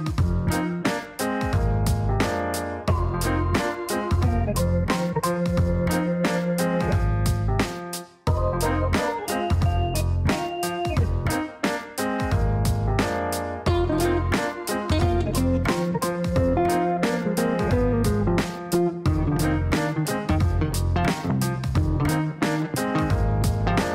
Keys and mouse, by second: 0.0 click, 1.4 KP_Multiply, 1.7 KP_2, 2.0 KP_Enter, 3.4 click, 6.9 click, 8.5 click, 11.6 click, 12.1 right click, 13.5 click, 17.0 click, 17.2 click, 18.4 click, 19.5 click, 20.6 KP_Multiply, 20.9 KP_2, 21.1 KP_Enter, 22.4 click, 23.4 click.